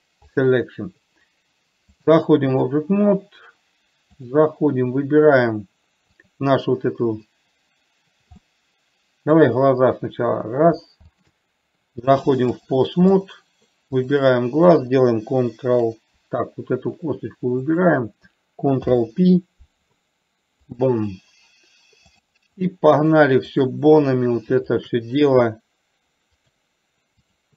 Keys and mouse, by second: 0.0 p, 2.4 click, 6.5 click, 8.9-9.7 middle drag, 11.6 shift+click, 13.0-13.6 drag, 14.4 click, 18.0 click, 19.1 ctrl+p, 22.6 click, 24.0 click, 26.6-27.5 drag.